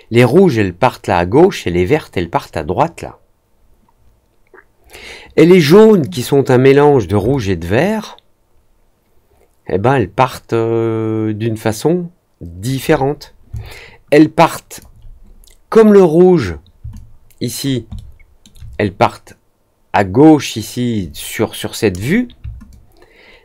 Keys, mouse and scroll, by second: 7.2-12.6 alt+drag, 13.5-14.7 alt+drag, 16.9 alt+click, 17.9 alt+middle click, 22.6-23.4 alt+drag.